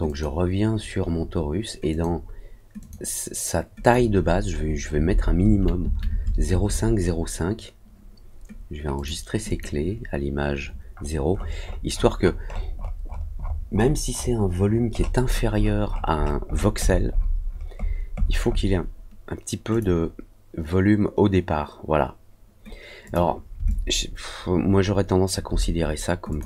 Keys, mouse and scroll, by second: 0.0 click, 1.8 click, 2.7 click, 3.8 click, 8.9 click, 9.4 click, 10.9 scroll up 2, 11.2 scroll down 2, 11.3 scroll up 2, 11.4 middle click, 11.5 middle click, 11.8 middle click, 12.1 middle click, 12.4 middle click, 12.7 middle click, 13.0 scroll up 1, 13.0 scroll down 1, 13.3-13.9 scroll up 2, 14.0 scroll down 1, 14.1 scroll up 1, 14.5 scroll down 1, 14.6 scroll up 1, 14.8 scroll down 1, 14.9 scroll up 1, 15.2-16.1 scroll down 6, 15.6 middle click, 15.8 middle click, 16.1 scroll up 2, 16.4-17.2 scroll down 6, 17.2 scroll up 2, 17.4 middle click, 17.7 middle click, 18.1 middle click, 18.4 middle click, 19.6 click, 23.0 click, 23.6-25.2 alt+drag, 26.2 click.